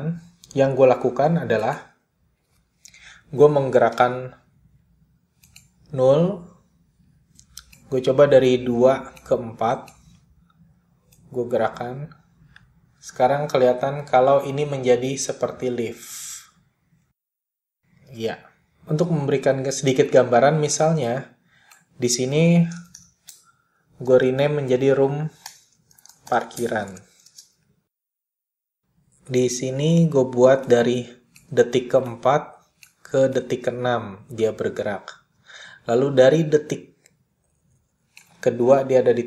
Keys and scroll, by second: 3.1 p, 23.2-27.2 typing, 27.4 Return.